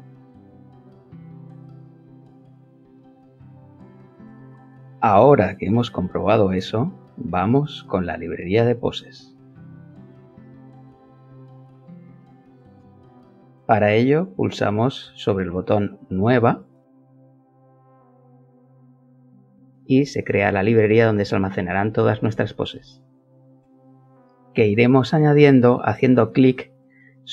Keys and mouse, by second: 1.6-2.8 drag, 3.7-7.9 middle drag, 7.9 click, 9.1 click, 14.4 click, 17.1-18.8 alt+middle drag, 18.8 alt+click, 20.6 alt+middle click, 24.2 alt+click.